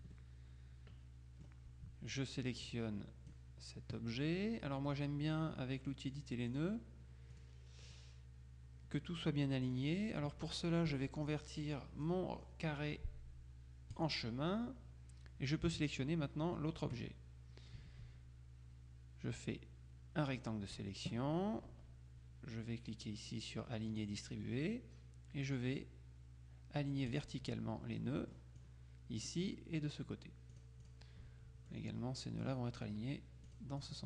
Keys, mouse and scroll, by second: 2.3-3.9 drag, 6.2 click, 7.5 click, 9.7 click, 14.0 click, 15.9 shift+click, 19.5-21.0 drag, 24.0 click, 27.2 click, 28.1 click, 30.6 click, 31.7 click, 33.6 click.